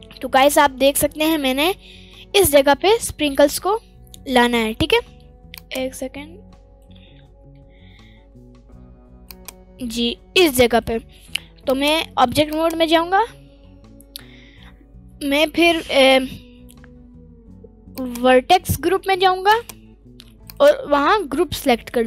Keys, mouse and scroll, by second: 0.4 middle click, 1.2-1.8 scroll down 1, 1.8 middle click, 1.8-2.1 scroll down 2, 2.8 Tab, 4.2 Tab, 4.3 middle click, 5.9 click, 8.3 scroll up 1, 9.6 click, 11.7-13.0 drag, 13.6-14.3 scroll down 1, 17.9 click, 18.3-19.5 scroll down 1, 19.5-21.0 drag, 19.5-20.4 scroll down 1, 21.4-21.9 middle drag.